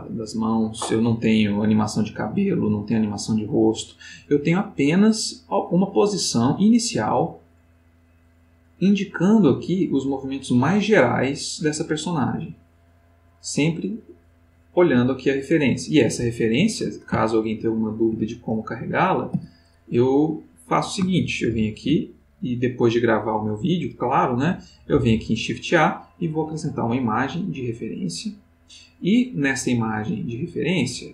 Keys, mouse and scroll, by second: 4.9-15.6 drag, 17.2-18.0 ctrl+middle drag, 18.5 ctrl+click, 19.3 x, 19.6 click, 21.5 shift+a, 27.5 click, 30.1 click, 30.8 click.